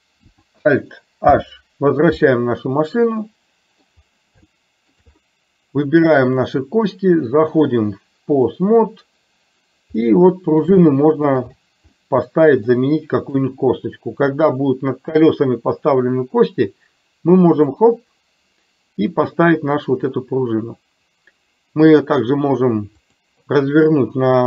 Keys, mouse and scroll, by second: 1.3 alt+h, 3.3-3.8 middle drag, 4.6-5.1 shift+middle drag, 6.3 click, 7.7-8.6 drag, 10.0 middle click, 11.0 shift+middle click, 12.0 middle click, 13.2 click, 17.6 click, 23.0-24.4 drag.